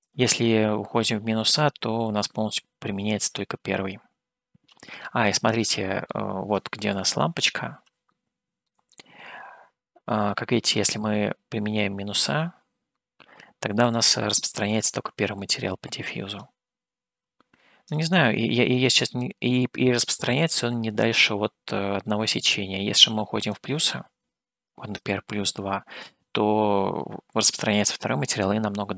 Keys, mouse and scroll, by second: 5.0-6.1 middle drag, 7.3 click, 8.1 shift+middle click, 8.9-10.4 middle drag, 13.9 click, 16.5-18.2 drag, 23.6-26.2 drag.